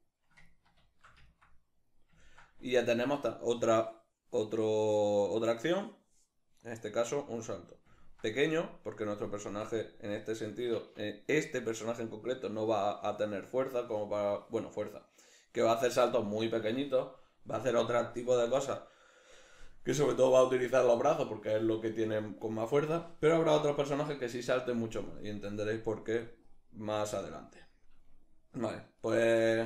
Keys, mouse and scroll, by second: 0.1 ctrl+middle click, 7.0-8.9 middle drag, 27.1-29.5 middle drag.